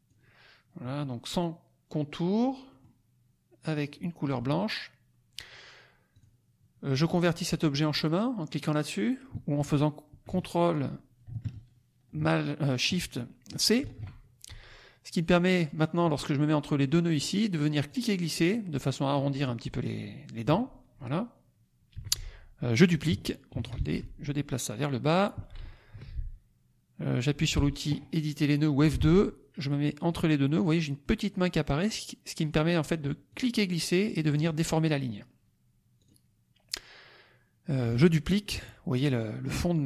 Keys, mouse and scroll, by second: 2.6 middle click, 3.8 click, 4.5 middle click, 6.1 click, 13.7 ctrl+shift+c, 17.8-19.3 drag, 21.9 F1, 23.5 ctrl+d, 23.9-25.3 ctrl+drag, 25.9 F2, 33.2-34.5 drag, 35.9 click.